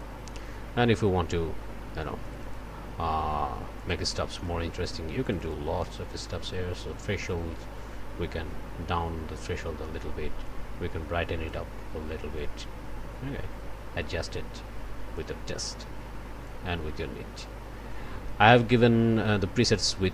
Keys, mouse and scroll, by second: 2.2 click, 3.8 click, 4.4 click, 5.2 click, 7.2-9.8 drag, 10.4-11.7 drag, 12.3-15.4 drag, 16.4-20.1 drag.